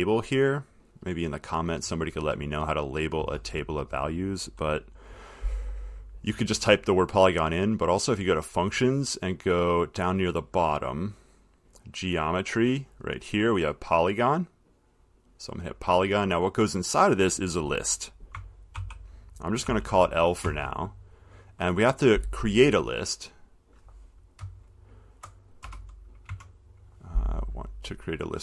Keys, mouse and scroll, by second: 1.0 click, 7.9 click, 10.6 click, 11.0 middle click, 11.7 middle click, 15.3 click, 18.5 click, 19.0-19.9 typing, 20.7 Return, 23.7 click, 24.6-25.4 Left, 25.9 Return.